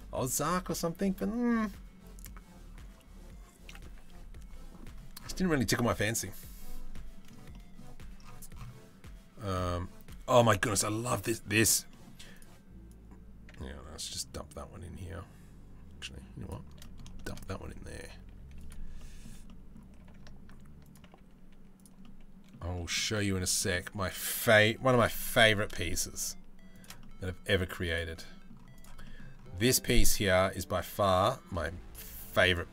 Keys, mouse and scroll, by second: 6.5-6.9 middle drag, 7.1 middle drag, 10.4-11.1 middle drag, 11.5 middle click, 17.2 s, 18.3 click, 18.6 middle click, 19.6 g, 20.8 s, 21.6-22.1 middle drag, 22.8 middle click, 23.2 middle drag, 24.4 g, 26.6 middle drag, 27.1 s, 27.8-28.1 middle drag, 28.7 middle click, 29.9 middle click.